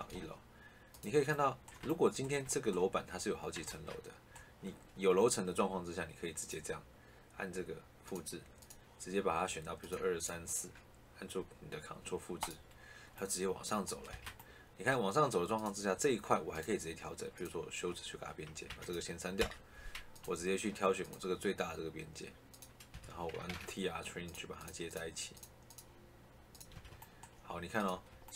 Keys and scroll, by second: 0.0 Escape, 3.6 shift+Caps_Lock, 14.0 Escape, 18.6 Tab, 22.8 Escape, 23.4 t, 23.8 r, 26.6 Escape.